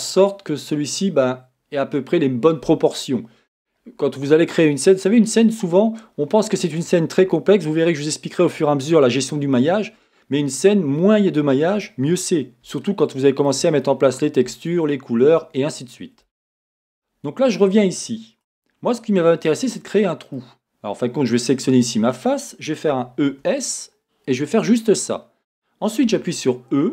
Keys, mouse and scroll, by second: 0.8 scroll, 6.8-9.3 scroll, 16.8 scroll, 18.5 Tab, 19.8-20.2 scroll down 2, 21.3 click, 22.9 e, 25.0 click, 26.1 e.